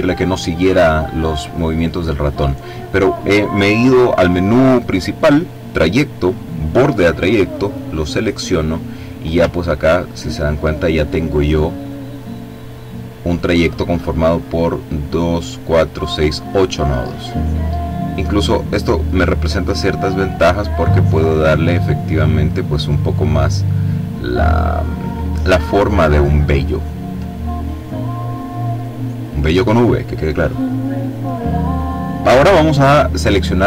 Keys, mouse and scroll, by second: 7.1 click, 9.2-10.1 ctrl+scroll up 2, 11.8 click, 18.1-20.3 drag, 20.6-22.9 drag, 23.8-25.3 drag, 25.3-27.0 ctrl+scroll down 4, 27.3-29.0 drag.